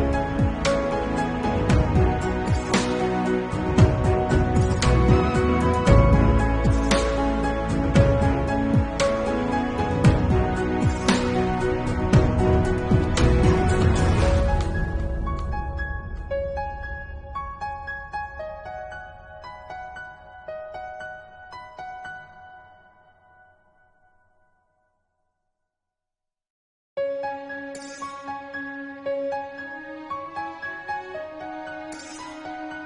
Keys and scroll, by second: 5.6 ctrl+s, 6.0 ], 6.6 [, 7.9 ctrl+s, 9.9 [, 11.4 ctrl+s, 15.6 ctrl+s, 18.8 ctrl+s, 21.1 ctrl+s, 21.7 ctrl+s, 22.1 ctrl+s, 23.1 ], 23.9 [, 25.0 [, 26.2 ctrl+alt+z, 26.7 ctrl+s, 27.2 ], 28.8 [, 29.2 ], 31.1 [, 32.0 ctrl+alt+z, 32.5 ctrl+s.